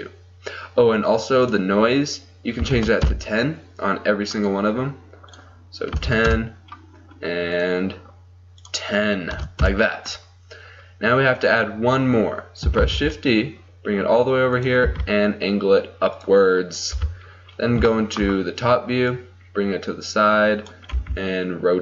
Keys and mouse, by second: 1.5-4.4 drag, 4.4-12.9 right drag, 5.4-7.6 drag, 8.6-11.6 drag, 12.9-14.6 drag, 12.9 shift+d, 14.9 r, 17.0 KP_7, 19.2-21.0 drag, 21.0 r.